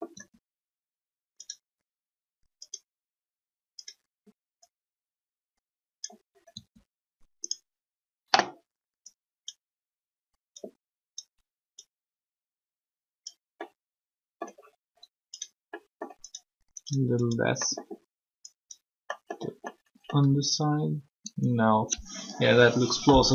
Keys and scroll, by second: 0.1 r, 6.5 r, 20.2 r.